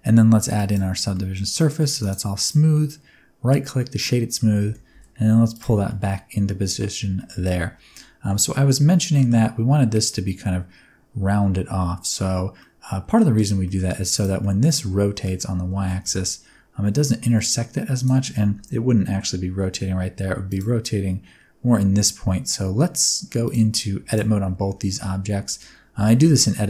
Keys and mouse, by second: 1.0-1.7 middle drag, 1.9 click, 2.7 middle click, 3.7 middle click, 4.6 g, 4.8 x, 5.4 ctrl+click, 5.9 shift+middle click, 6.1 middle click, 7.2 shift+middle click, 7.4-8.3 middle drag, 9.2 middle click, 12.5 middle click, 13.5 middle click, 14.3 middle click, 15.2 middle click, 15.7 r, 16.0 y, 17.9 click, 19.0 KP_1, 20.4 click, 23.4 click, 24.0 shift+click, 25.4 Tab, 25.9 a.